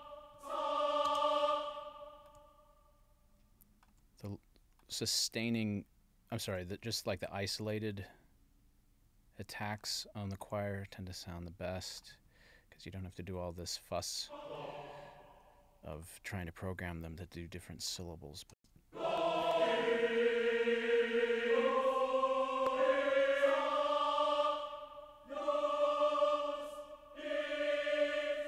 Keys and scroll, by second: 1.1 space, 18.5 space.